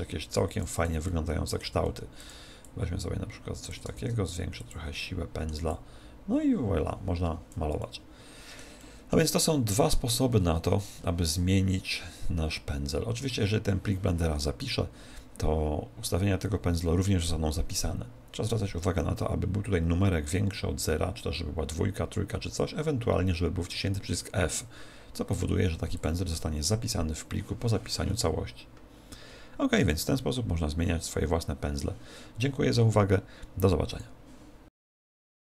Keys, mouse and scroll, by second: 0.6 click, 1.0 middle click, 1.8 f, 2.2 click, 2.8 click, 3.9 shift+f, 4.6 click, 4.9 middle click, 5.7 click, 7.8 middle click, 8.8 middle click, 10.6-11.2 scroll up 9, 25.9 click, 30.4-31.9 scroll down 1.